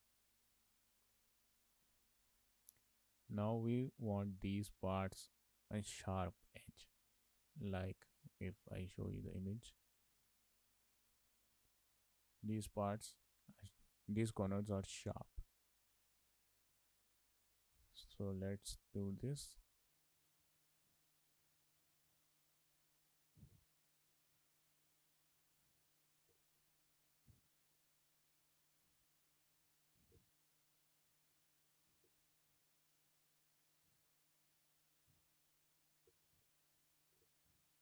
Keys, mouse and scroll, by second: 0.0 z, 0.6 z, 7.2 z, 9.1 Left, 10.9 Left, 18.1 Left, 18.9 click, 19.1 click, 20.2 z, 20.6 click, 21.4 z, 21.8 Tab, 22.5 click, 23.5 k, 24.1 shift+middle click, 24.7-25.1 scroll up 4, 24.9 shift+middle click, 25.4 1, 25.7 click, 26.0 shift+click, 26.3 j, 26.5 scroll down 1, 26.6 shift+middle click, 27.1 shift+middle click, 27.8 shift+middle click, 28.5 shift+middle click, 29.3 scroll down 1, 29.4 shift+middle click, 30.1 k, 31.2 scroll up 2, 31.4 shift+middle click, 32.0 k, 36.4 shift+middle click, 37.2 k.